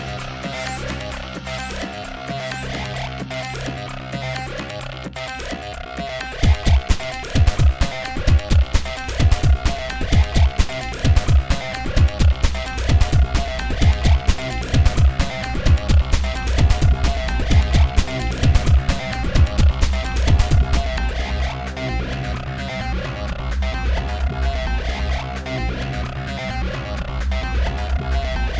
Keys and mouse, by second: 0.0-1.3 typing, 3.2 r, 3.4 r, 3.5 g, 4.6-7.4 typing, 6.0 ctrl+z, 8.7 r, 9.0 r, 9.4 g, 10.9 ctrl+z, 11.1-12.8 typing, 14.4-20.3 typing, 22.0 n, 23.8 Escape, 23.8 m, 24.6 ctrl+z, 26.7 middle click, 27.3-28.5 typing.